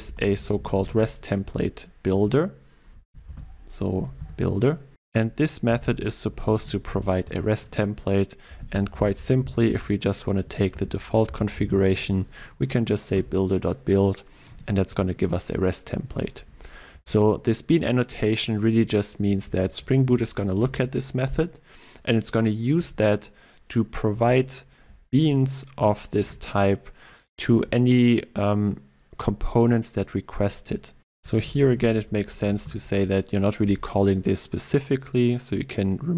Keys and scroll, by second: 2.2 Return, 3.4 ctrl+space, 4.2 Return, 7.3 Return, 20.6 ctrl+w, 26.2 ctrl+w, 32.7 alt+Return.